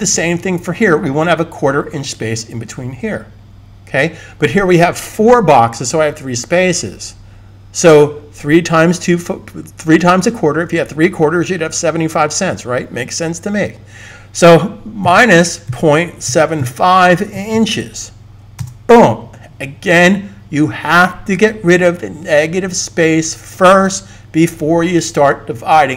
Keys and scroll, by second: 15.0-17.5 typing.